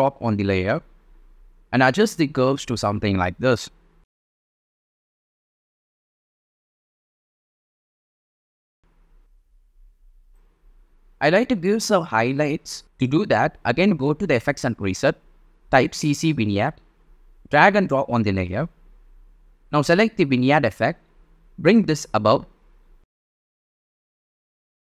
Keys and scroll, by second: 16.2-17.4 typing.